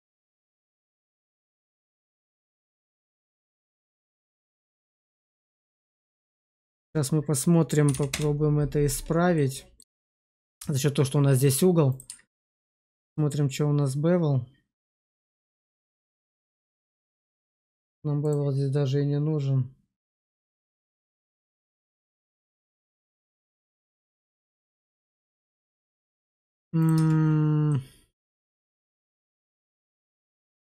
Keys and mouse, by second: 0.2-5.8 drag, 6.2-8.0 drag, 9.3 middle click, 9.9 shift+middle drag, 12.0 q, 16.6 shift+click, 18.1 click, 21.7-25.2 middle drag, 25.7 shift+middle click, 26.1 middle click, 26.7 click, 26.8 Tab, 27.6-30.6 middle drag.